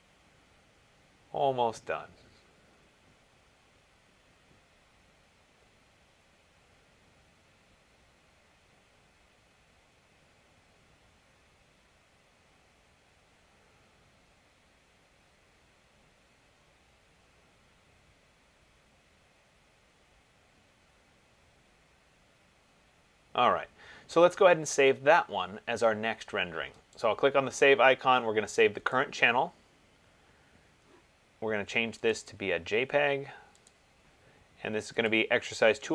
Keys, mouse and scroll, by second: 27.3 click, 29.1 click, 32.3 click, 33.9 click, 35.2 click.